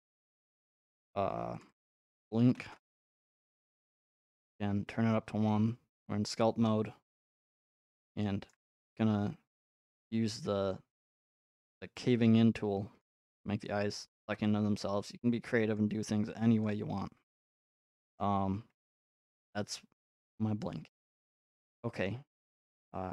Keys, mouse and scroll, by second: 1.7 click, 1.8 click, 2.1-2.7 typing, 2.7 Return, 4.5 click, 5.8 middle click, 7.0 g, 8.0 middle click, 8.5 shift+middle click, 9.6 middle click, 9.9 x, 13.0 ctrl+click, 13.6 middle click, 13.9 middle click, 14.3 g, 15.8 click, 16.6 click, 17.8 click, 18.0 middle click, 18.7 middle click, 18.8 middle click, 19.9 scroll, 20.6 click, 21.8-22.5 scroll, 22.5 scroll.